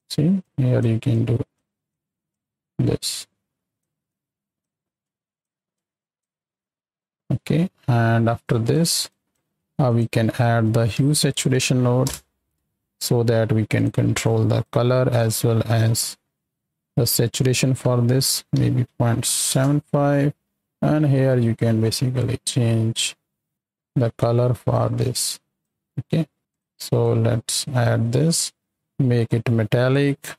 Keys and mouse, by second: 0.4 click, 1.1 click, 1.9 click, 3.1 click, 4.0 click, 5.0 click, 5.7 click, 7.6-8.0 middle drag, 8.4 drag, 9.0 click, 9.5 shift+a, 14.2 click, 15.1 click, 16.5 middle click, 17.3-19.5 drag, 20.5-25.5 shift+drag, 26.0 middle click, 26.3 click, 27.0 click, 29.2 click.